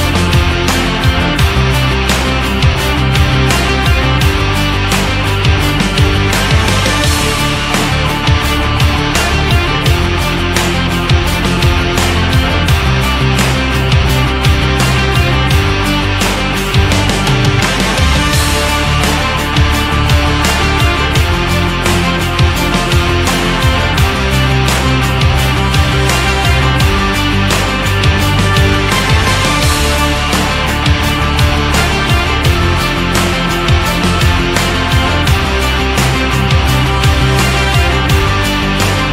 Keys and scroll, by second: 18.6 Down, 20.1 Right, 20.9 Down, 22.4 Down, 23.0 Down, 24.3 Up, 24.7 Down, 27.9 Down, 30.3 Down, 34.3 Right.